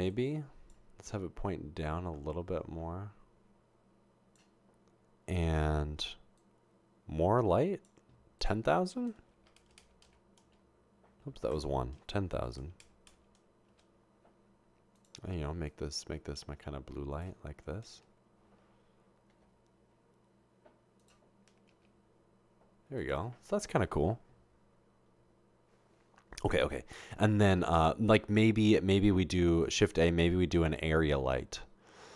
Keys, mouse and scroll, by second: 0.1 click, 6.4-7.7 drag, 8.4 click, 9.6-10.0 typing, 10.4 Return, 11.5 click, 12.4-13.7 typing, 15.0 click, 19.5 typing, 21.7 typing, 27.7 typing, 29.8 typing.